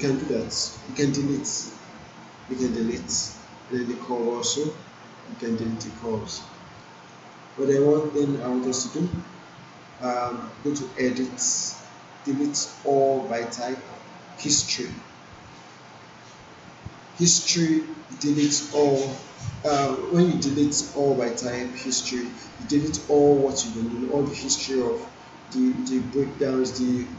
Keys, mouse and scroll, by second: 0.8 ctrl+z, 2.9 Delete, 4.3 click, 5.1 Delete, 6.8 alt+right click, 7.3 alt+middle click, 7.9 alt+click, 8.5 click, 11.3 click.